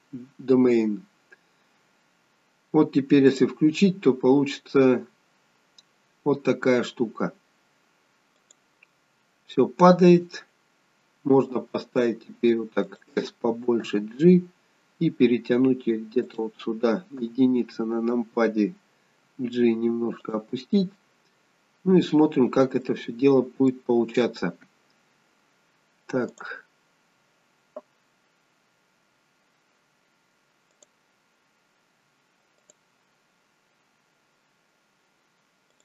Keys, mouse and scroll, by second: 3.4 click, 8.6 click, 11.4 s, 13.9 g, 17.2 KP_1, 19.2 g, 21.7-22.8 scroll up 3, 22.8 middle click, 24.0-24.8 scroll down 2, 26.3 click, 30.7 click, 32.6 click.